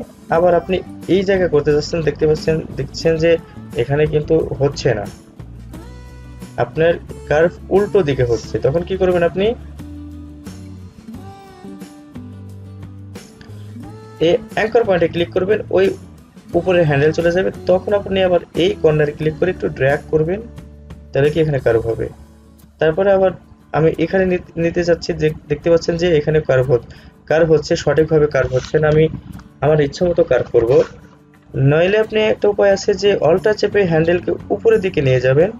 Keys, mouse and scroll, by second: 14.7 click, 19.2-33.4 drag, 34.3-35.5 alt+drag.